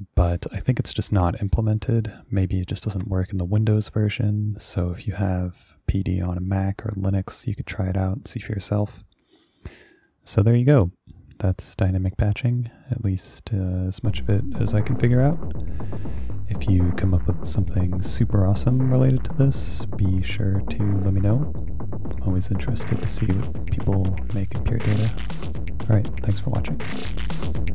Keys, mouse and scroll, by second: 10.1 click.